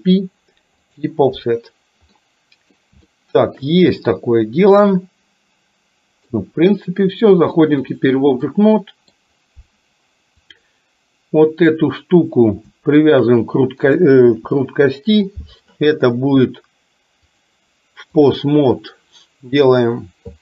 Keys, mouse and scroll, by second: 2.1 middle click, 3.1 shift+middle click, 4.0-6.4 middle drag, 7.5-8.1 drag, 8.5 middle click, 10.5 click, 13.1 shift+click, 17.4-18.5 drag, 19.8 click.